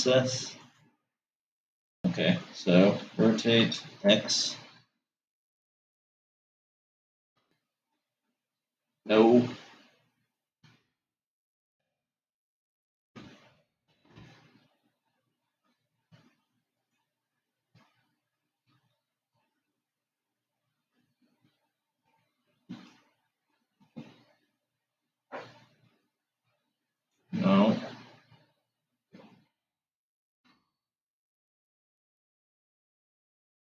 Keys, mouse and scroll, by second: 3.4 r, 10.2 r, 19.5 g, 30.3 g.